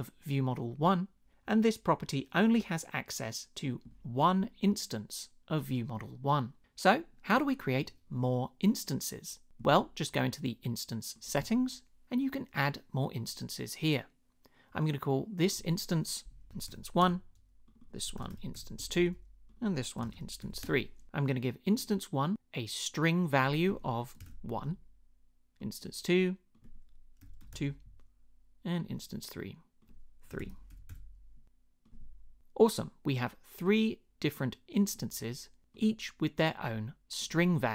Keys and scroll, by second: 16.2-20.9 typing, 23.9-24.8 typing, 26.9-28.0 typing, 30.0-31.2 typing.